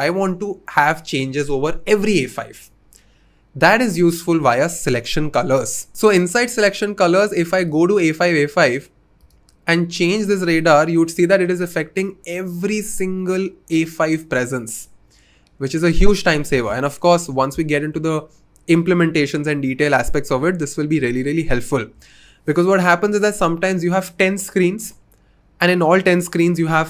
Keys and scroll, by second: 16.5 super+z.